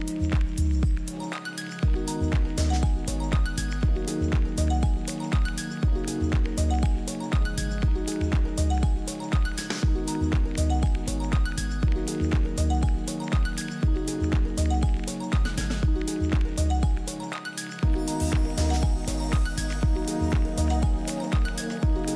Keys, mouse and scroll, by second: 0.0-4.6 drag, 4.6 KP_1, 7.7 KP_2, 8.4 KP_3, 9.8 KP_2, 10.4 KP_3, 11.9 KP_1, 15.7 KP_3.